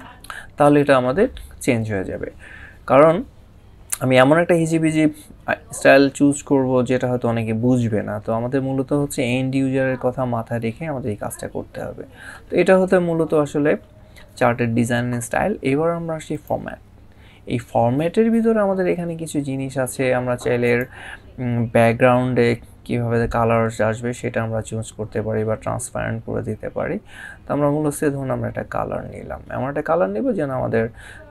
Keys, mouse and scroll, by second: 16.1 click, 20.4 click.